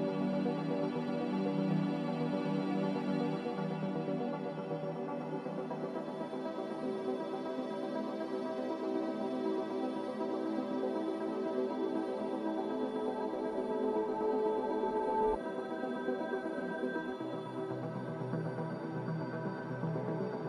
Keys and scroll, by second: 7.1-8.8 typing, 12.2 s, 15.5 a, 19.8 ctrl+c.